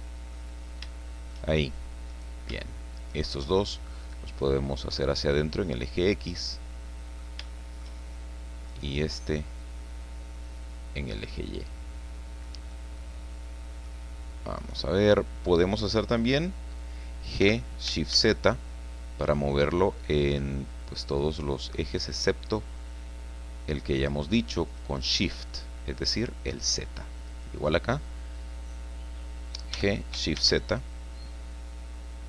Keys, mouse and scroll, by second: 0.6 scroll up 1, 0.9 shift+middle click, 2.1 right click, 3.1 shift+right click, 3.8-6.3 drag, 6.4 middle click, 7.4 shift+middle click, 8.7 right click, 9.6-12.6 drag, 12.7-14.0 middle drag, 14.6 right click, 17.4 g, 18.1 shift+z, 24.6 click, 25.5 middle click, 26.0 click, 27.3 right click, 29.7 g, 30.3 shift+z.